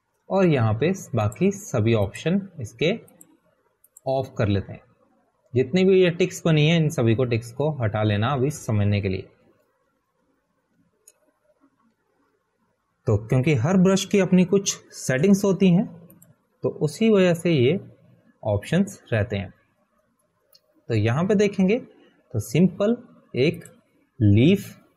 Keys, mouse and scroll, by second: 3.7 click, 10.0-12.6 typing, 14.2 ], 15.9 ], 18.6 click.